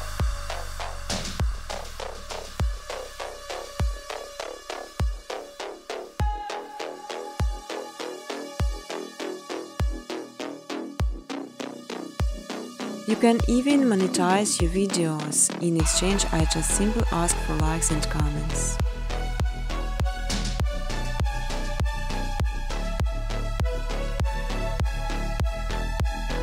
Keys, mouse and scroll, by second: 0.6 Tab, 0.8-1.5 typing, 3.8-6.5 typing, 8.5-9.3 typing, 8.7 scroll, 10.9-11.7 typing, 11.2 scroll, 12.6 click, 14.1 click, 14.7-17.0 typing, 18.6 scroll, 19.2 scroll, 20.8 click, 20.8 typing, 21.5 scroll, 22.8 click, 24.1 middle click, 24.1 middle click, 24.2 middle click.